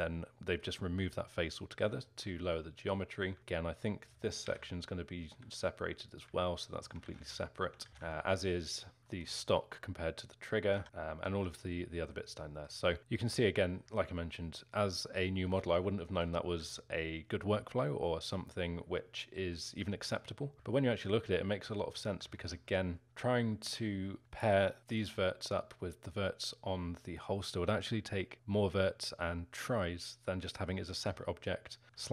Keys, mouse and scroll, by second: 4.4 l, 5.4 g, 6.4 alt+middle click, 7.0 ctrl+z, 7.3 alt+middle click, 7.8 ctrl+z, 7.9 ctrl+z, 9.0 l, 9.1-10.7 alt+middle drag, 10.7 a, 10.8 l, 11.4-13.3 alt+middle drag, 13.3-14.0 scroll up 2, 13.3-18.3 middle drag, 18.3-19.0 scroll up 4, 18.4-22.7 middle drag, 22.7-24.2 scroll up 2, 22.7 middle click, 24.2 z, 25.1 z, 26.8-29.9 scroll down 2, 31.1 z, 32.0-32.1 alt+middle drag.